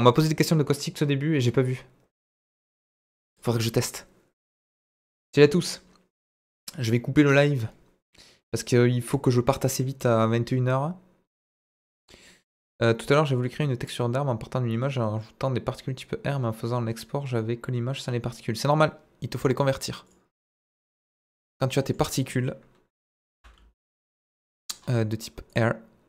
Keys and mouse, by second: 19.7-21.2 drag, 21.5-21.9 middle drag, 23.1 Delete, 23.2 shift+a, 25.5 drag.